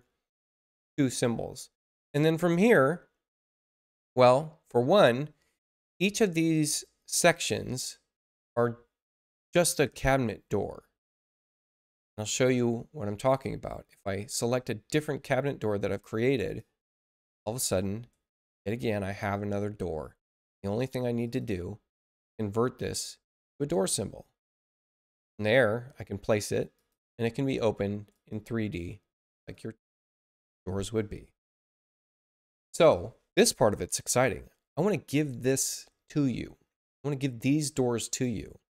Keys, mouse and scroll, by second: 13.2 click, 16.4 click, 18.3 space, 18.7 click, 21.2 click, 23.2 click, 25.3 click, 26.7 click, 27.9 space, 28.1 click, 29.3 click.